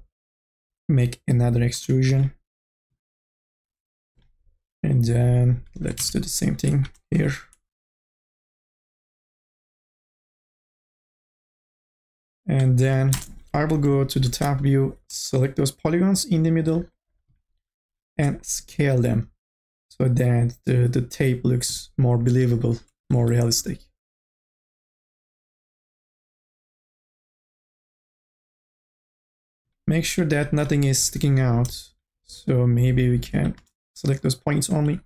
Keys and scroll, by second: 2.1 t, 6.2 ctrl+z, 7.1 t, 9.4 t, 13.0 1, 13.1 space, 14.6 3, 18.7 t, 25.1 ctrl+z, 30.9 1, 33.6 space.